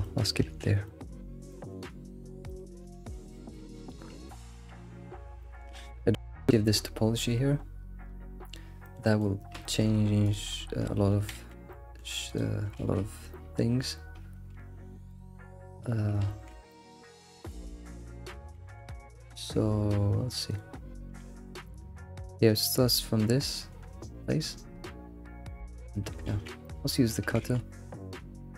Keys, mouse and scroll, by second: 0.3 shift+middle click, 0.5 ctrl+s, 0.9-2.0 middle drag, 2.2-2.5 scroll up 2, 2.5 alt+middle click, 3.3 shift+middle click, 3.9 scroll up 11, 4.3-5.1 shift+middle drag, 5.1 scroll down 3, 5.4-5.8 shift+middle drag, 5.9-6.8 scroll up 4, 8.4-8.8 scroll down 10, 8.9 alt+middle click, 9.7 shift+middle drag, 9.9 scroll up 1, 10.3 click, 10.6 scroll up 3, 11.4 alt+shift+z, 11.8 shift+middle click, 12.3 click, 12.8 alt+shift+z, 15.1 click, 16.3 alt+x, 16.7-17.2 shift+middle drag, 17.2-18.5 scroll up 4, 17.5-18.0 shift+middle drag, 18.6 alt+x, 18.9 alt+x, 20.5 click, 21.3 alt+x, 26.3 alt+x, 26.6-27.4 shift+middle drag, 27.4 alt+x.